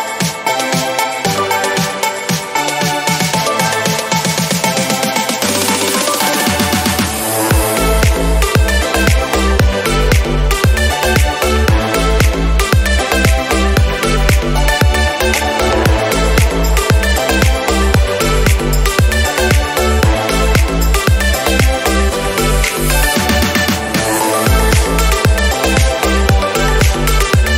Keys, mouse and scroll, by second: 0.1 Tab, 0.2 scroll down 1, 0.5 click, 0.6-0.9 scroll up 3, 0.9 scroll down 1, 1.1-2.5 scroll up 1, 2.5 click, 5.5 middle click, 5.8 Tab, 6.0 Tab, 6.3 click, 6.5 Tab, 7.5 click, 8.1 Tab, 8.8 g, 10.0 Tab, 10.2 Tab, 10.4 click, 10.8-11.9 scroll up 2, 11.9 click, 12.4 click, 13.0 ctrl+z, 13.4 click, 14.0 g, 15.0 click, 16.9 click, 17.0 scroll down 3, 17.8 scroll down 1, 18.0 scroll up 1, 20.4 shift+a, 20.8 s, 22.0 r, 22.9 click, 24.5-25.6 scroll down 1, 25.6-27.5 drag.